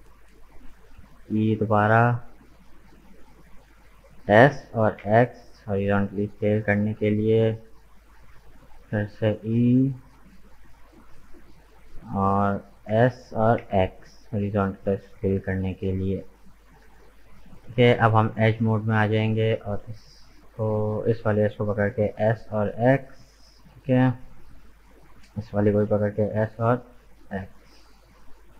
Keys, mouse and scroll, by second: 1.0 e, 3.9 s, 8.3 e, 12.8 s, 18.1-19.6 drag, 19.6 alt+right click, 22.1 s, 25.4 alt+right click, 26.2 s.